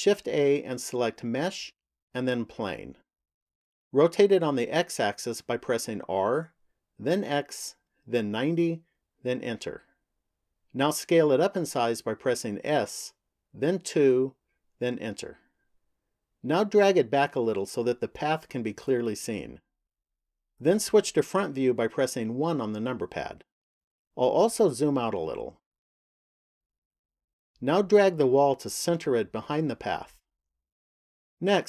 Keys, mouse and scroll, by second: 0.4 shift+a, 5.8 r, 12.4 s, 17.9 click, 22.2 KP_1, 25.1-28.3 scroll down 3, 28.3 click.